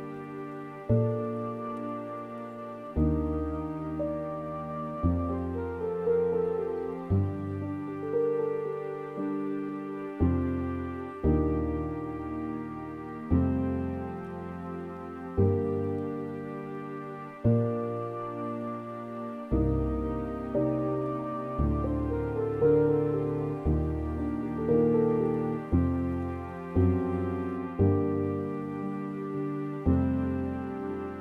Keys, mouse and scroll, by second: 6.2-13.8 drag, 14.5-18.0 drag.